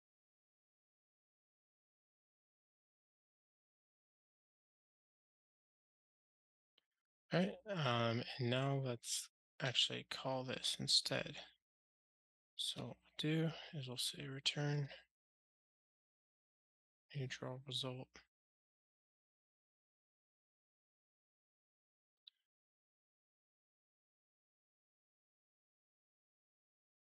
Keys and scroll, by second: 1.2 Return, 3.3 Delete, 4.1 alt+shift+Right, 4.3 Delete, 5.7 Return, 6.3 ctrl+alt+shift+r, 14.9 Return.